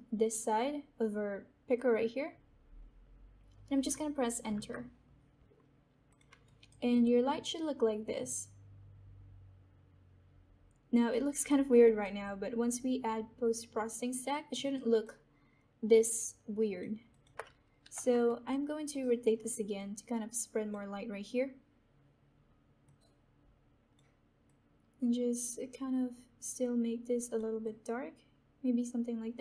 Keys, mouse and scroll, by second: 6.0 click, 6.4 alt+right click, 6.8-11.4 alt+drag, 11.4 alt+middle click, 12.2-14.5 alt+drag, 14.5 alt+right click, 15.2-16.8 alt+drag, 17.7 e, 18.2 alt+right click, 19.1-27.5 alt+drag, 27.5-29.4 drag.